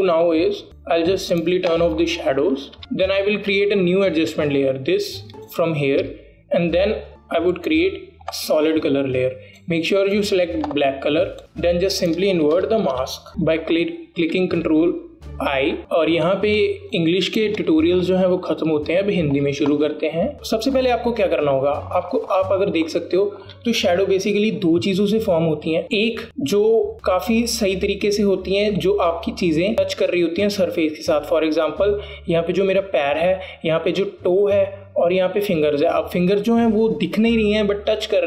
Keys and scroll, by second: 13.5 ctrl+i, 14.3 ctrl+alt+i, 15.7 ctrl+alt+i, 16.8 ctrl+alt+i, 17.7 space.